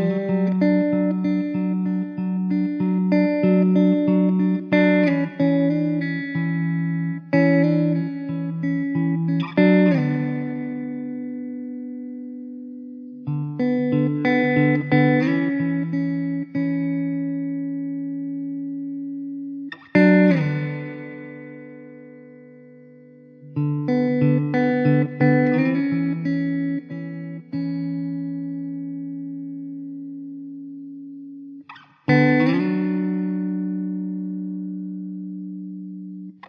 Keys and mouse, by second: 5.1 alt+w, 5.6 middle click, 7.6 1, 9.0 alt+middle click, 17.4 alt+middle click, 17.9 ctrl+z, 18.6 ctrl+z, 21.2 alt+w, 29.7 alt+w, 30.5 alt+middle click, 31.9 alt+middle click, 34.1 alt+w.